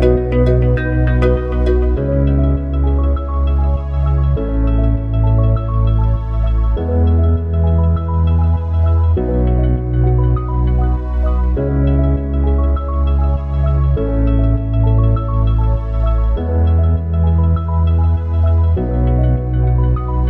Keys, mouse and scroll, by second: 0.2 s, 2.6 s, 6.0 click, 10.2 s, 12.4-15.7 middle drag, 18.5-20.2 drag.